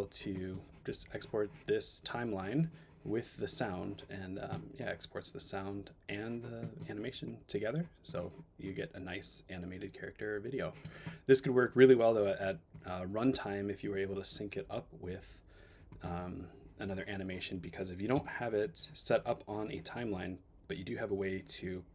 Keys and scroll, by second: 18.1 BackSpace.